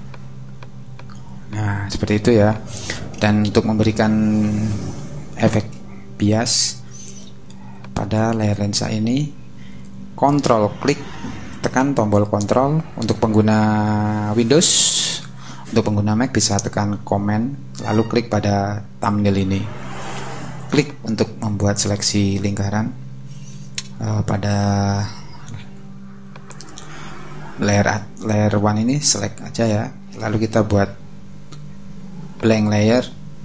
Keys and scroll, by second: 0.6 space, 3.8 super+-.